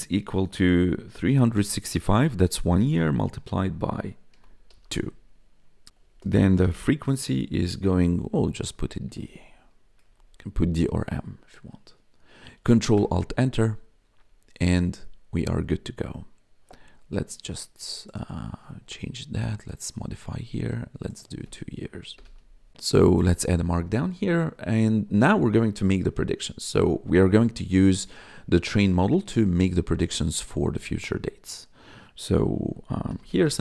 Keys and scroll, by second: 0.7-1.8 typing, 4.3 shift+8, 4.7 2, 5.9-8.9 typing, 9.7 Escape, 10.0 Right, 10.1 Left, 10.3 Right, 12.9 ctrl+alt+Return, 22.1 BackSpace, 22.2 2, 32.8-33.6 typing.